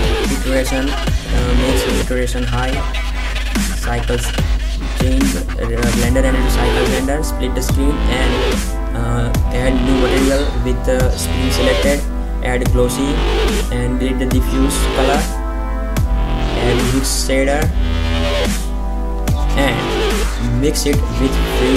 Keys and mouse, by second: 1.1 middle click, 4.1 click, 9.6-10.8 drag, 10.8 shift+a, 14.5-14.8 drag, 15.4 Delete, 16.2 shift+a, 21.2 shift+a.